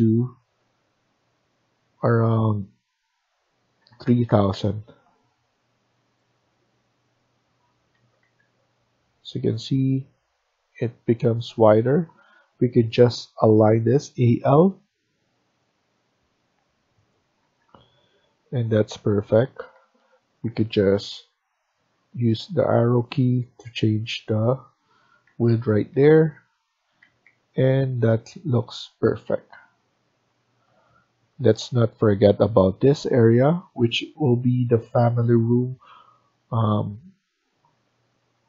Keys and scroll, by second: 3.7 typing, 7.9 Escape, 8.1 Escape, 10.2 Left, 10.9 Right, 11.2 Right, 11.6 Escape, 11.7 2, 17.3 Escape, 17.5-18.3 typing, 19.6 Escape, 19.9 Escape, 21.1 Down, 21.4 Down, 22.6 Escape, 25.2 Down, 25.4 Down, 25.8 Down, 26.0 Down, 26.9 Escape, 27.1 Escape.